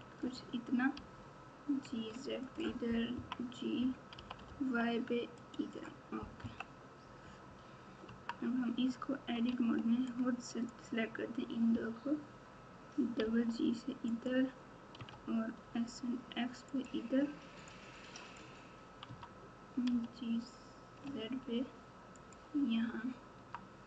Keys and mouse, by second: 0.9 g, 3.1 KP_3, 4.1 g, 6.4 KP_1, 8.0 Tab, 9.5 alt+z, 10.1 click, 11.7 g, 14.9 s, 17.7 click, 19.0 Tab, 19.9 g, 23.3 Tab.